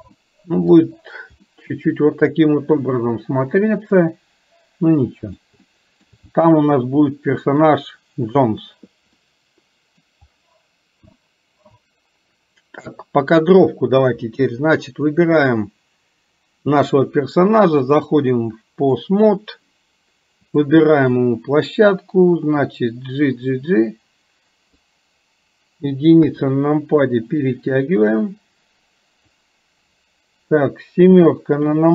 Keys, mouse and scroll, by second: 0.1-0.9 shift+middle drag, 1.5-5.4 middle drag, 5.6-6.1 shift+middle drag, 7.1-7.6 middle drag, 9.2-10.1 middle drag, 11.3-11.8 shift+middle drag, 18.0-19.1 drag, 20.5 click, 21.3 middle click, 22.6-25.0 drag, 27.5-29.5 drag.